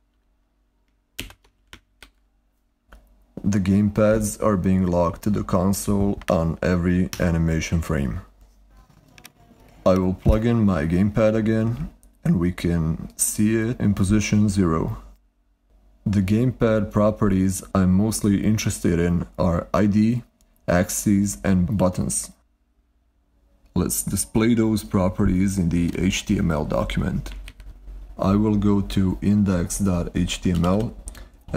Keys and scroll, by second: 1.5 ctrl+Left, 1.8 super+r, 27.6 ctrl+Tab, 30.0-31.5 typing.